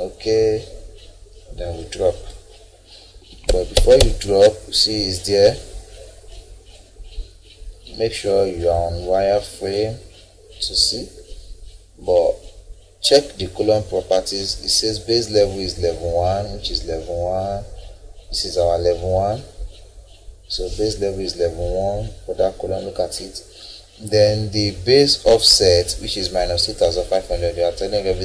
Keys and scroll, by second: 3.2 Escape.